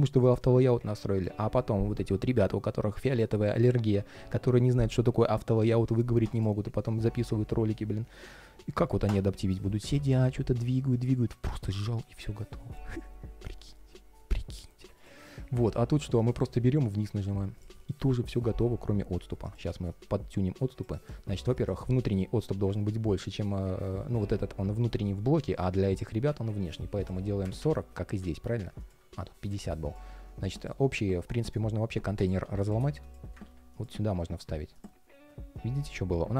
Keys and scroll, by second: 31.1 shift+super+g, 33.2 super+x, 33.9 super+v.